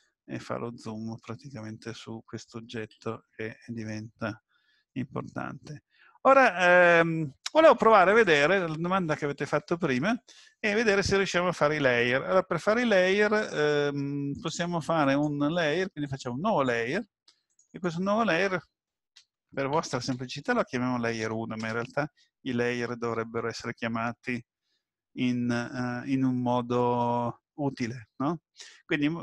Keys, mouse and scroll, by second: 1.6 KP_Decimal, 2.9 Escape, 3.1-4.6 scroll down 11, 4.9 middle click, 8.2 click, 14.3 click, 15.0 right click, 17.5 click, 17.7 click.